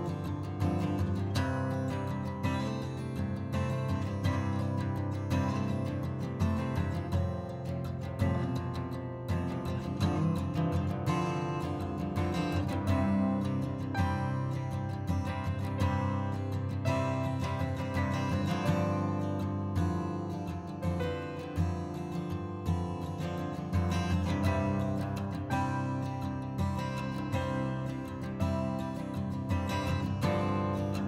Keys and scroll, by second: 28.3 ctrl+z.